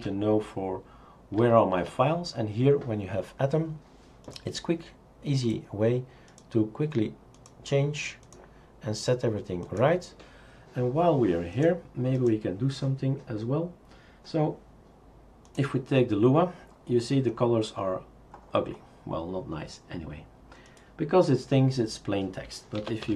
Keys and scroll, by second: 22.6-23.1 typing.